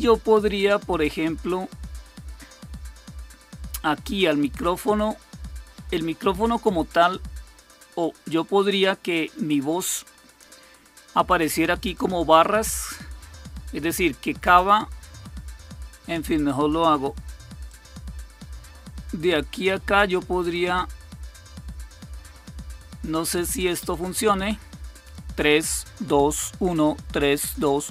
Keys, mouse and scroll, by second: 17.6-24.2 drag.